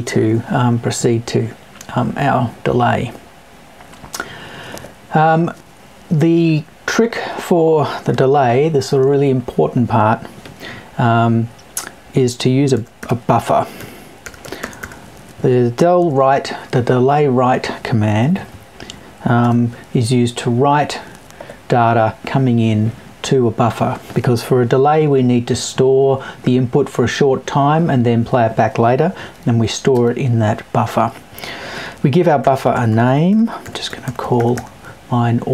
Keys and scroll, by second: 18.0 Left.